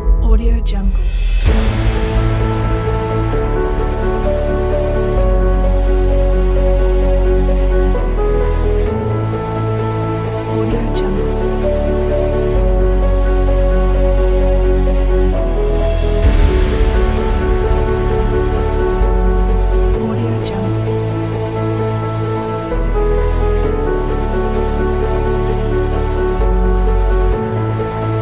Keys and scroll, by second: 9.0 space.